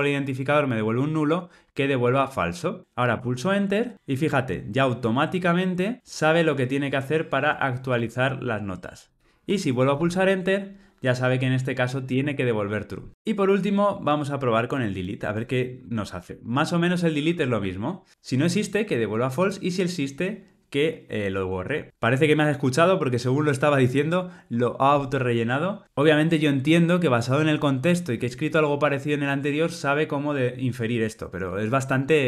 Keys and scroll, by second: 2.0 Tab, 7.9 Tab.